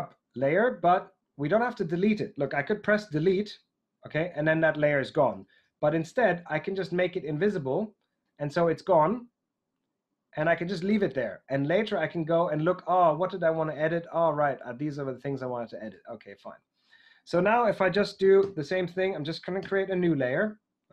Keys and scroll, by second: 3.2 BackSpace, 5.5 super+z, 18.3 shift+super+n, 19.5 Return.